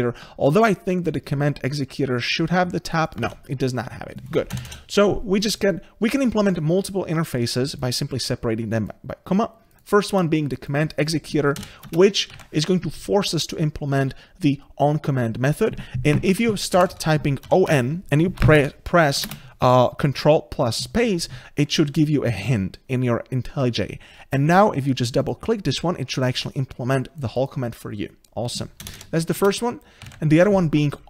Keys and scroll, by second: 0.7 ctrl+b, 11.9 ctrl+space, 18.6 Escape, 21.3 ctrl+space, 29.5 ctrl+space.